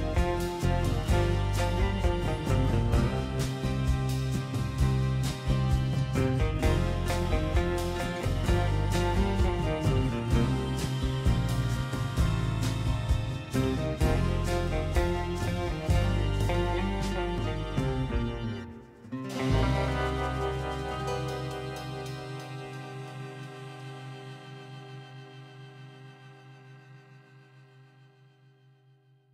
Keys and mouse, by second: 3.4 Tab, 3.7 a, 5.4 shift+n, 7.0 click, 8.2 click, 10.1 3, 10.4 click, 11.1 middle click, 12.6 shift+n, 14.1 Tab, 14.9 middle click, 15.8 click, 17.7-19.4 drag, 19.5 Tab, 19.9 middle click, 21.7 click, 22.2 shift+middle click, 22.9 middle click, 24.2 x, 26.9 click, 27.4 x, 28.9-29.3 middle drag.